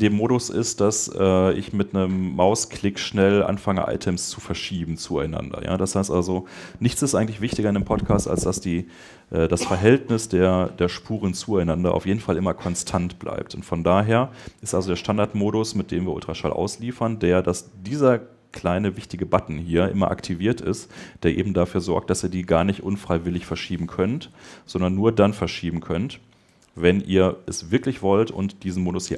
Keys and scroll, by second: 26.3 Escape.